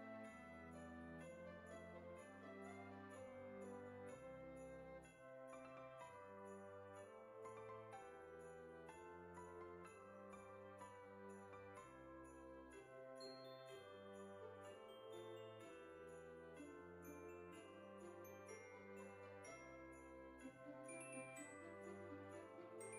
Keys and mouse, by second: 0.0 o, 0.3 click, 1.8 s, 3.9 click, 4.3 g, 5.3 click, 5.7 Tab, 6.6 g, 8.3 click, 8.5 r, 9.1 click, 9.4 g, 10.8 click, 12.0 right click, 12.6 click, 13.8 middle click, 16.2 KP_1, 17.7 shift+middle click, 19.4 F6, 20.9 click.